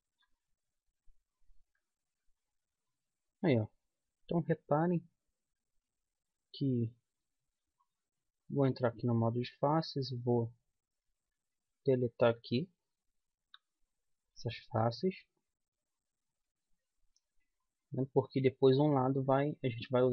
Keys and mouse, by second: 2.3 z, 7.6-10.3 middle drag, 9.3-11.1 drag, 10.3 right click, 11.1 middle click, 11.2 right click, 12.2-14.0 right drag, 13.7 x, 15.6 middle click.